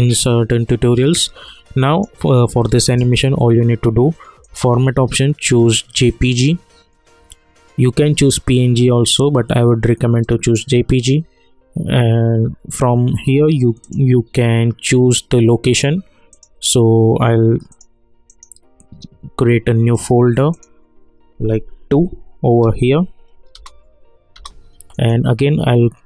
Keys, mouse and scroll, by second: 1.8 click, 4.4 click, 10.2 click, 13.8 click, 16.3 click, 18.3 right click, 19.9 click, 21.9 2, 23.5 Return, 24.9 right click.